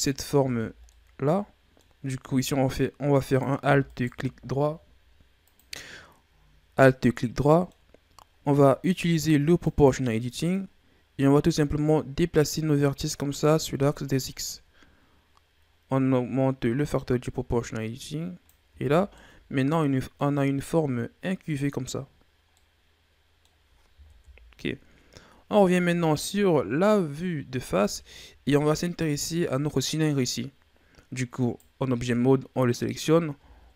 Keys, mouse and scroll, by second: 0.1 alt+right click, 0.9-3.3 middle drag, 3.3 right click, 3.9 alt+right click, 6.8-9.6 middle drag, 9.6 click, 10.3-11.8 middle drag, 11.8-14.8 drag, 18.6 Tab, 18.9 scroll down 2, 19.1-22.1 middle drag, 22.5-24.0 middle drag, 24.0 KP_1, 25.2 scroll down 2, 26.9-28.0 scroll up 4, 28.0-28.8 shift+scroll up 3, 28.8 right click, 31.3 right click, 33.3 Tab.